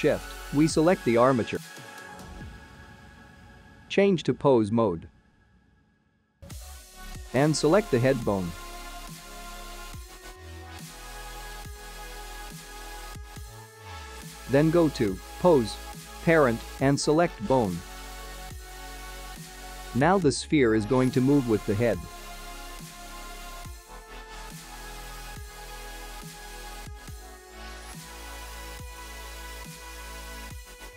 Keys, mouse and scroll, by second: 0.7-1.9 scroll down 2, 2.4 shift+click, 3.7-4.5 scroll up 5, 5.5 ctrl+Tab, 7.3 middle click, 10.2 click, 12.1 middle click, 14.7 click, 19.0 middle click, 21.2 ctrl+Tab, 22.2 click, 22.6-23.0 scroll down 3, 23.0 space, 29.9 space.